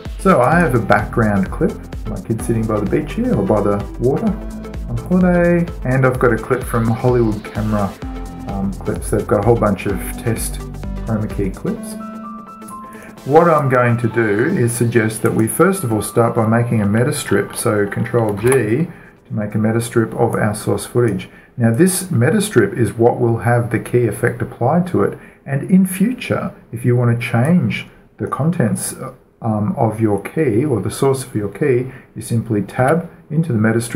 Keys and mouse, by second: 0.9-2.8 drag, 5.5-7.2 drag, 9.4-11.2 drag, 13.4-14.0 right drag, 14.0-15.2 middle drag, 15.2-15.7 drag, 15.7-16.8 middle drag, 16.8 click, 16.8 right click, 17.4 ctrl+right click, 18.9 ctrl+g, 20.9-23.2 drag, 22.2-24.0 right drag, 28.0-30.6 drag, 33.2 Tab.